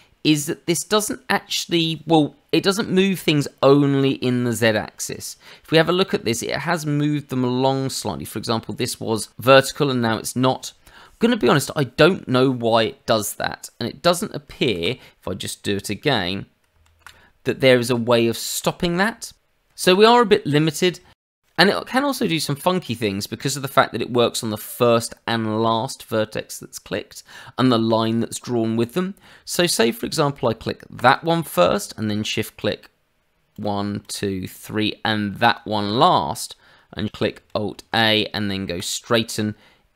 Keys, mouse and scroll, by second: 0.2 click, 14.6 ctrl+z, 16.8 alt+a, 20.7-21.0 scroll up 1, 21.1 shift+middle click, 21.3 click, 28.5 scroll down 1, 28.9 shift+middle click, 30.9 click, 33.5 shift+click, 34.0 shift+click, 34.5 shift+click, 35.4 shift+click, 37.5 alt+a.